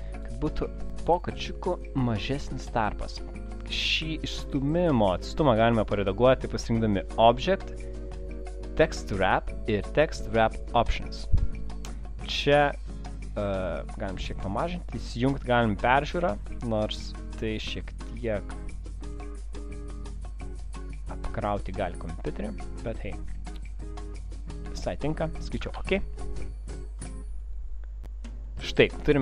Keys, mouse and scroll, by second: 2.3 click, 7.2 click, 13.1 click, 14.2 click, 17.2 click, 24.7 click, 27.5 click.